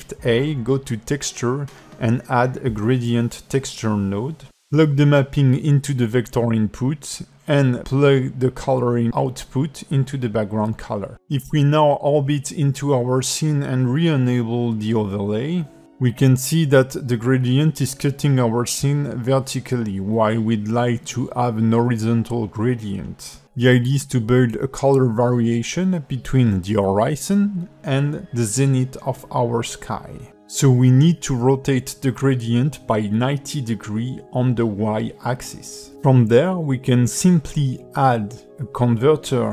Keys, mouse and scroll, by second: 3.2 click, 5.3 click, 8.9-9.8 scroll down 6, 10.1 middle click, 19.8 middle click, 21.5 click, 22.1 middle click, 25.1 click, 28.0 click, 29.8 click, 34.4 scroll down 3, 34.8 middle click, 37.9 click, 38.3-38.8 scroll down 4, 38.8 click, 39.1 g.